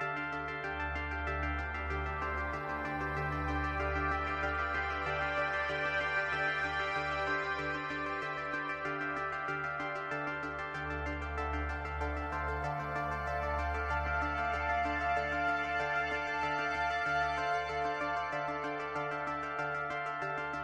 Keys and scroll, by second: 2.1 space, 3.3 space.